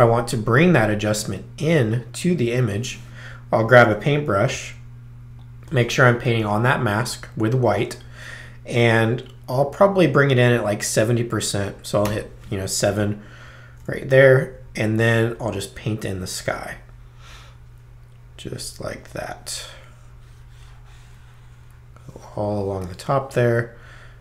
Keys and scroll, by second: 0.1 b, 3.8 b, 4.5 ctrl+b, 12.1 7, 12.8 ctrl+7.